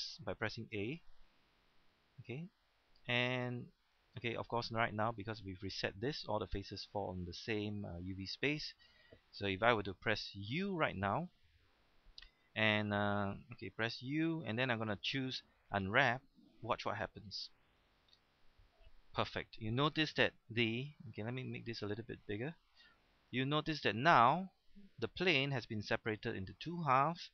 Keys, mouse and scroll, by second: 0.7 a, 1.1 a, 1.7-3.0 scroll down 1, 3.0 click, 3.7-4.4 scroll down 1, 4.4 middle click, 4.9 scroll up 1, 9.2-10.4 middle drag, 10.5 u, 17.6 click, 20.2-20.7 scroll up 1, 22.7 click, 23.8-24.7 scroll up 1.